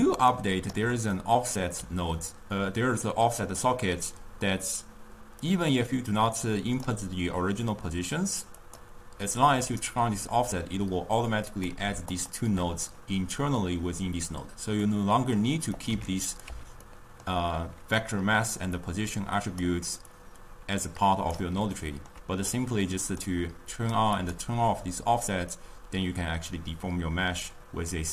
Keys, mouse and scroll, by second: 0.4 ctrl+right click, 1.2-4.3 middle drag, 5.5 drag, 8.9 click, 11.6 click, 12.3 shift+click, 15.0-16.0 middle drag, 16.0 click, 16.4 x, 17.0-19.2 middle drag, 19.2 click, 20.3-22.0 drag, 22.0-22.7 ctrl+middle drag, 22.7 click, 23.9 click, 25.7-28.1 drag.